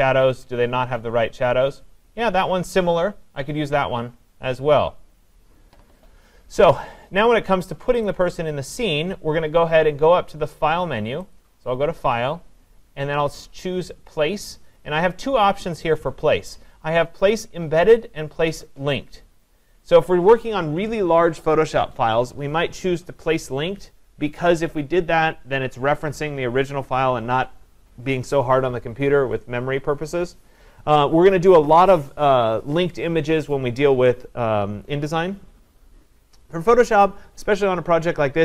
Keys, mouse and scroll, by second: 3.6-4.9 scroll up 4, 6.7 click, 8.1 click, 11.4 click.